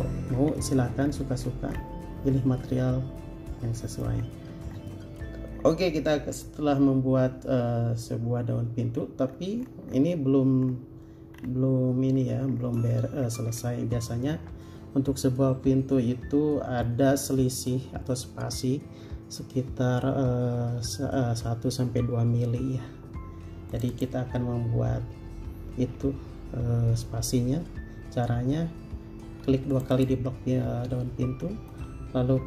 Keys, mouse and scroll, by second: 0.5 scroll down 1, 3.8 middle click, 4.4-4.9 scroll down 1, 5.8 scroll up 1, 9.5 scroll down 1, 12.3 scroll up 1, 24.1 double click, 29.4 Escape, 30.1 click.